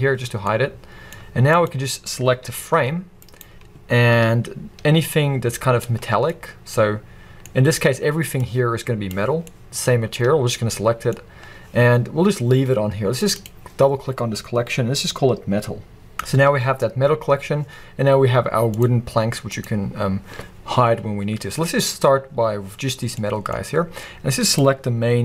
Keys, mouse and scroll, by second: 0.3 scroll down 2, 0.4-1.6 middle drag, 1.6 click, 2.5 g, 3.4 right click, 3.9-4.8 scroll up 1, 5.8-6.3 scroll down 1, 6.3-8.4 middle drag, 7.5-7.9 scroll up 2, 7.9-8.4 scroll down 2, 8.4 click, 9.5-13.2 middle drag, 13.2 click, 13.3-18.8 drag, 16.1 Return, 19.5 click, 23.0 scroll down 1, 23.2-24.5 middle drag, 23.5-24.5 scroll up 1, 24.5 click.